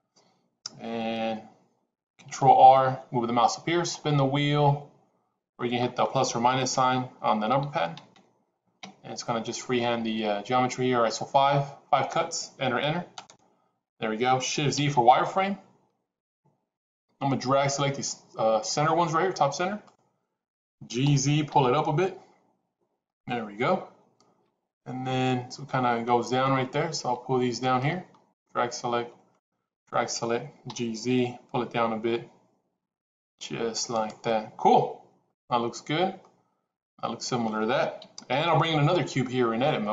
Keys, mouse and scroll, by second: 2.3 ctrl+r, 16.0 shift+z, 17.5-19.8 drag, 21.0 g, 27.8 click, 29.3 shift+click, 30.6 g, 35.2 click, 36.0-37.4 middle drag, 37.8 KP_1.